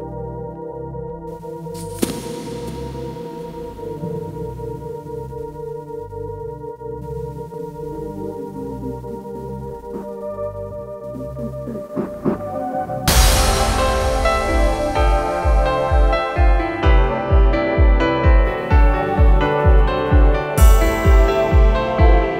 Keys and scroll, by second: 2.4 F1, 4.7 F1, 7.2 shift+t, 7.2 shift+h, 7.3 shift+i, 7.4 shift+g, 7.6 Return, 9.5 shift+s, 9.6 shift+h, 9.7 shift+i, 9.9 shift+n, 10.0 Return, 13.7-15.2 typing, 14.2 Return, 15.3 Return, 22.1 shift+l, 22.3 shift+e.